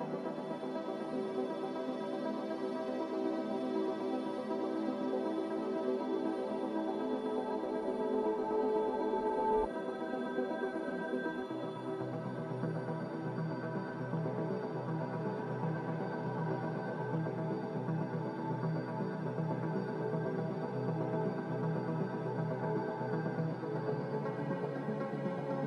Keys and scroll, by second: 1.0-2.0 typing, 4.3 a, 6.0 s, 7.0-8.7 typing, 8.2 Tab, 8.7 Return, 13.6 a, 16.6 n, 20.9 ctrl+z, 21.8 b, 22.7 Delete, 24.3 n.